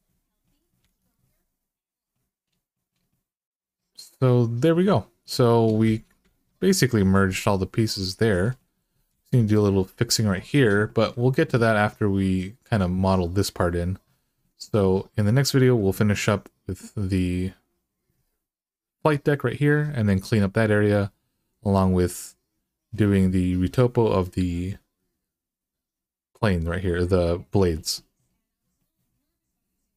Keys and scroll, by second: 0.6 alt+z, 6.1 alt+z, 8.9 alt+z.